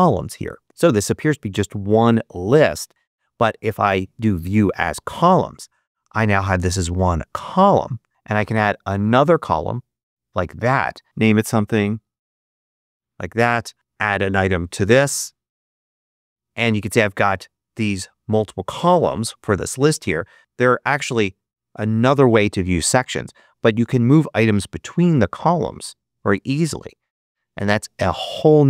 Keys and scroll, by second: 11.0 shift+super+BackSpace, 11.2-12.6 typing, 14.4-15.6 typing.